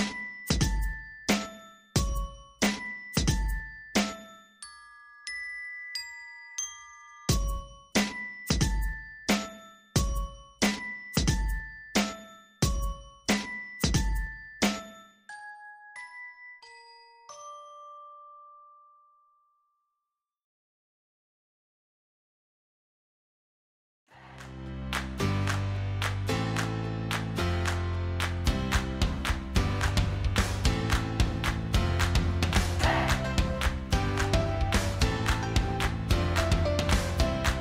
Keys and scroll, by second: 15.9 ctrl+alt+shift+v, 37.1 ctrl+alt+shift+v.